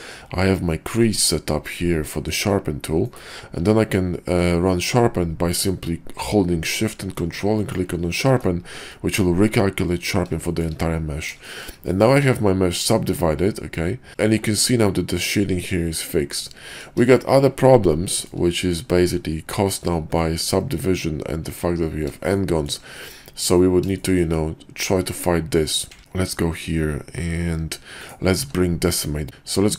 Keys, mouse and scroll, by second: 3.5 q, 8.8-9.2 middle drag, 10.4 shift+middle click, 11.5 shift+middle drag, 12.2-14.1 middle drag, 16.6 middle drag, 17.2 shift+middle drag, 18.2 shift+middle click, 20.3 shift+middle drag, 22.4-22.7 shift+middle drag, 23.2 middle click, 24.0 shift+middle drag, 26.0 ctrl+`, 28.3 q.